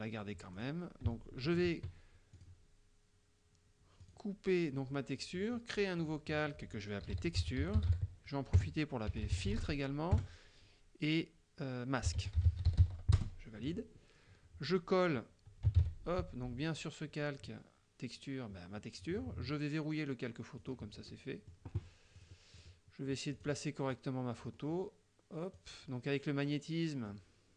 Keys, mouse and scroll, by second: 0.6 click, 2.5 click, 4.1 click, 6.0 click, 6.8-10.2 typing, 10.2 KP_Add, 11.9-13.3 typing, 15.8 ctrl+v, 20.7 click, 21.2 middle click, 22.3 click, 22.6 click, 23.4 click, 24.0-25.8 drag, 27.1-27.5 drag.